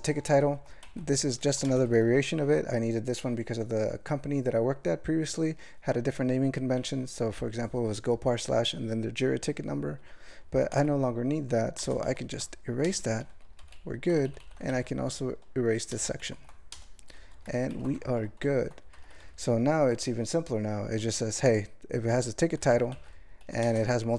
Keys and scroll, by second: 0.2 ctrl+g, 0.5 ctrl+n, 0.8 alt+m, 1.5 ctrl+f, 1.7 ctrl+space, 7.0 ctrl+g, 10.7 alt+m, 11.8 ctrl+space, 12.1 ctrl+alt+f, 12.9 BackSpace, 13.5 ctrl+a, 13.6 ctrl+k, 14.1 ctrl+n, 14.3 ctrl+n, 14.4 ctrl+n, 14.7 alt+m, 15.9 ctrl+space, 16.2 ctrl+alt+f, 16.7 BackSpace, 17.3 ctrl+p, 17.5 ctrl+e, 17.7 ctrl+d, 18.0 alt+\, 18.1 alt+\, 18.9 alt+m, 19.2 ctrl+p, 19.4 ctrl+p, 19.5 ctrl+p, 22.1 ctrl+e, 22.6 ctrl+n, 22.9 alt+m, 23.4 ctrl+f, 23.6 ctrl+space, 23.7 ctrl+e.